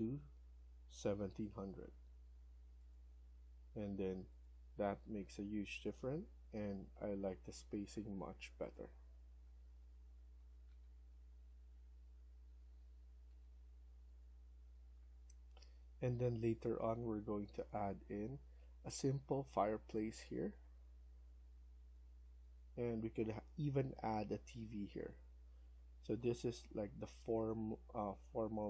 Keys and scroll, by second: 0.0-1.0 typing, 3.6 Escape, 5.2 Down, 5.7 Right, 6.2 Left, 7.4 Escape, 7.8 Escape, 9.3 Right, 9.6 Right, 9.8 Right, 10.2 Right, 12.7 shift+Escape.